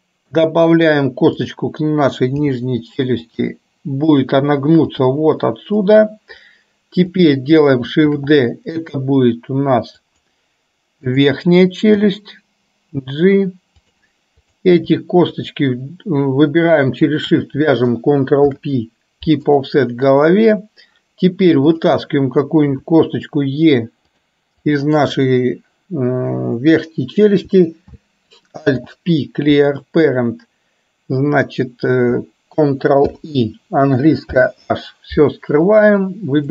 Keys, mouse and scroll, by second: 1.5 click, 4.3 click, 4.9 g, 7.3 click, 8.1 shift+d, 17.1 shift+click, 18.5 ctrl+p, 21.8 click, 28.8 alt+p, 33.1 ctrl+i, 34.4 h, 36.0 click.